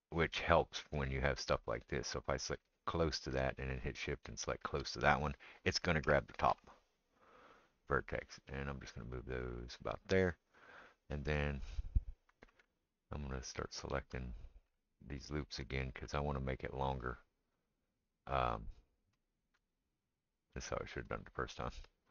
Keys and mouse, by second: 1.7-4.2 middle drag, 4.2 shift+click, 4.3-16.5 shift+middle drag, 6.0 g, 11.7 alt+click, 13.8 alt+shift+click, 15.2 alt+shift+click, 16.5 alt+shift+click, 16.6 alt+shift+middle click, 17.5 alt+shift+click, 17.6 alt+shift+middle click, 18.2 alt+shift+click, 18.3 alt+shift+middle click, 19.2 alt+shift+click, 19.5-22.1 alt+shift+middle drag, 21.1 alt+shift+click.